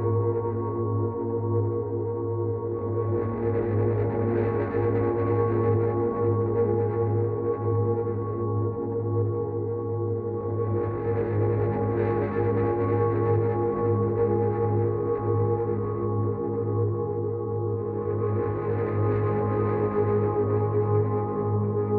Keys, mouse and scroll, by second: 6.6 click, 7.4 click, 17.0 click.